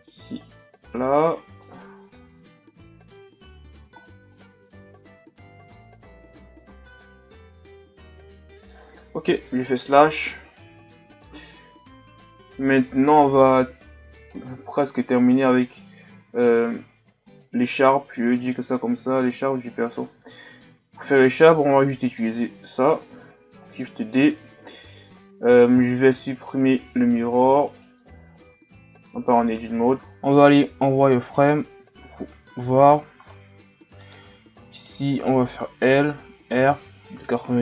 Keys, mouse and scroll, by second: 1.6 click, 3.4 Tab, 3.8 a, 4.0-4.3 scroll down 3, 4.3-7.4 middle drag, 9.4 KP_Divide, 10.5-11.2 scroll down 5, 11.2-11.8 shift+scroll up 3, 12.3-15.5 scroll up 5, 16.6-17.2 shift+scroll up 4, 17.3-19.9 shift+scroll up 2, 19.9-21.0 shift+scroll up 4, 21.0 scroll down 2, 22.1-23.2 right drag, 23.2 shift+d, 27.7-28.4 drag, 28.4 Tab, 29.6 click, 31.4 right click, 31.9 z, 32.4-33.2 ctrl+scroll down 4, 33.2-34.0 scroll up 4, 34.0 right click, 34.7 right click, 35.7 l, 36.6 r.